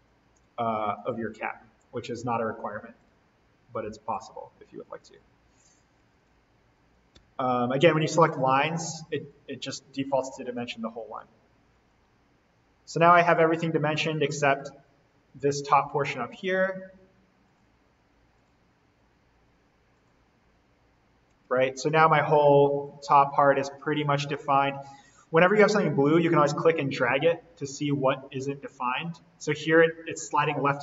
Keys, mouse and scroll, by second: 0.9 click, 2.5-2.9 scroll down 1, 2.9 click, 6.0 Escape, 7.1 d, 8.2 click, 11.1 scroll up 1, 12.7 Escape, 13.0-14.4 scroll down 1, 14.4-14.7 scroll up 1, 15.7-16.3 scroll down 1, 16.3 d, 17.4 click, 21.2 Escape, 21.6-22.9 scroll up 1, 22.9-23.4 scroll down 1, 24.9-25.4 scroll up 1, 25.9 Escape, 26.2-30.8 drag.